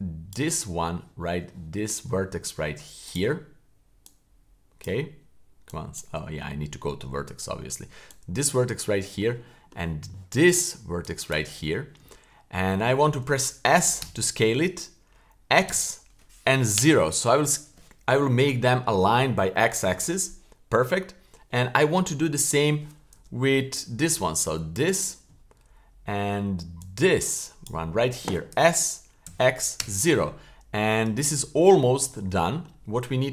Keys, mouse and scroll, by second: 0.7-1.5 scroll up 5, 1.5 shift+middle click, 3.1-3.9 right drag, 4.1 click, 4.6 click, 5.7-6.0 drag, 6.2 Tab, 8.1 click, 9.0 shift+middle click, 9.2 shift+scroll down 1, 9.4 shift+middle click, 10.1 shift+middle click, 11.0-11.4 shift+drag, 11.7-12.0 scroll down 3, 12.0 shift+middle click, 12.7 shift+scroll up 1, 14.0 s, 24.4 click, 26.8 shift+click, 28.5 s, 32.1 shift+middle click, 33.1 shift+middle click.